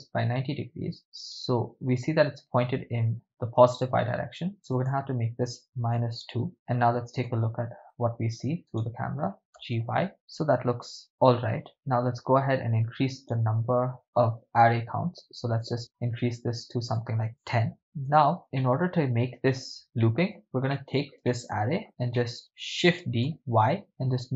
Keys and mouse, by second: 0.3 Return, 1.5 right click, 4.7-6.5 drag, 7.2 KP_0, 8.8 right drag, 9.6 g, 9.8 y, 11.7 right click, 13.4 right click, 15.5 click, 16.9 click, 18.2 KP_0, 18.7 middle click, 20.1 ctrl+middle click, 20.7-21.1 middle drag, 21.3-21.8 shift+middle drag, 22.2 ctrl+shift+middle click, 23.0 shift+d, 23.2 y.